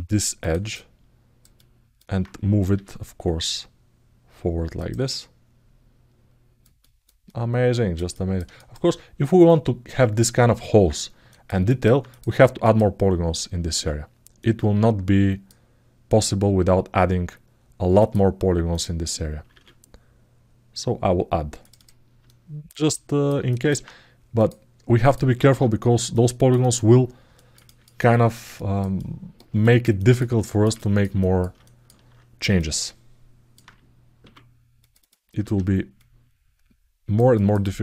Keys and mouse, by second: 0.5 alt+middle click, 1.3 alt+middle click, 4.8-6.4 alt+middle drag, 6.5 ctrl+alt+middle click, 7.0 alt+middle click, 7.9 ctrl+alt+middle click, 8.3 alt+shift+middle click, 11.0 ctrl+alt+middle click, 11.4 alt+middle click, 11.8 click, 12.4 click, 13.5 ctrl+r, 19.3 ctrl+r, 22.0-23.0 middle drag, 23.2 alt+shift+middle click, 24.1 click, 24.8 click, 25.2 ctrl+r, 27.1 alt+middle click, 27.4 ctrl+alt+middle click, 27.9 alt+shift+middle click, 28.3 ctrl+alt+middle click, 28.7 middle click, 29.4 ctrl+alt+middle click, 30.2 alt+shift+middle click, 30.5 ctrl+alt+middle click, 30.9 alt+middle click, 31.4 alt+shift+middle click, 32.4 alt+middle click, 34.0 2, 34.6 click, 35.7-36.9 right drag, 37.1 ctrl+alt+middle click.